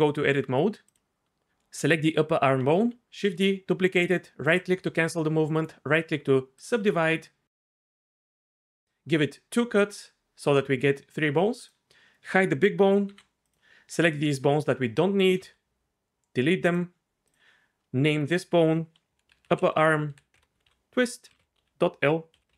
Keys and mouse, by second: 3.2 shift+d, 5.9-8.6 drag, 13.1 h, 15.4 x, 18.1 F2, 19.3 BackSpace, 19.5 BackSpace, 19.8 BackSpace.